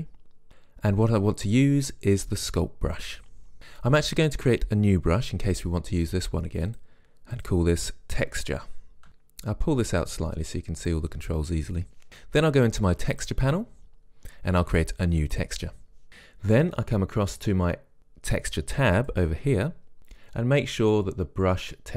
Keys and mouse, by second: 6.9-9.1 drag, 10.3-12.1 drag, 13.3-15.2 drag, 15.4 click, 19.1 click, 21.0-21.9 drag.